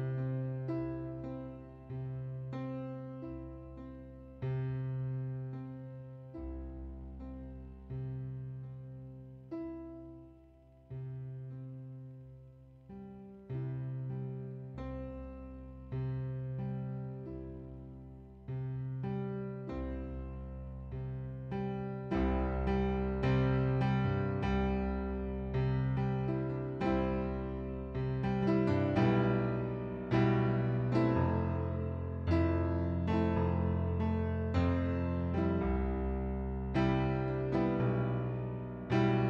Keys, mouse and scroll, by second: 0.3 shift+click, 3.5 click, 5.1 click, 6.4 middle click, 7.7 click, 12.0 middle click, 13.8 middle click, 15.3 right click, 16.4 click, 18.0 right click, 19.1 click, 20.1 ctrl+d, 21.1 click, 22.7 ctrl+d, 23.0 ctrl+d, 23.2 ctrl+d, 23.5 ctrl+d, 23.9 ctrl+d, 24.2 ctrl+d, 24.5 ctrl+d, 24.9 ctrl+d, 26.4 middle click, 27.7 click, 28.5 click, 29.8 click, 30.3 shift+click, 30.8 shift+click, 31.7 shift+click, 32.2 shift+click, 33.5 shift+click, 35.6 click, 38.7 right click.